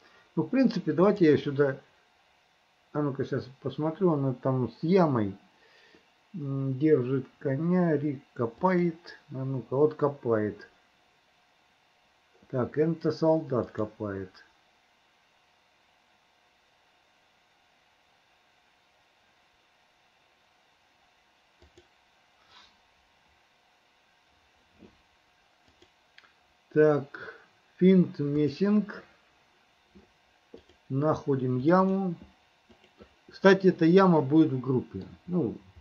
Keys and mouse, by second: 1.2-9.8 drag, 13.7-22.7 drag, 25.8-28.2 drag, 34.3 middle click.